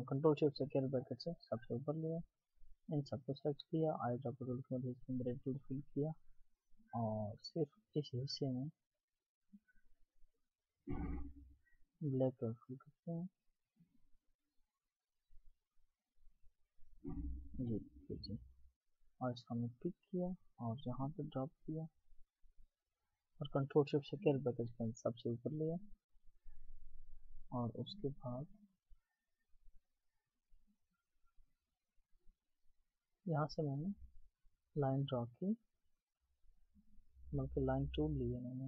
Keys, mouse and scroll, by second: 0.3 ctrl+shift+], 6.5 double click, 17.1 double click.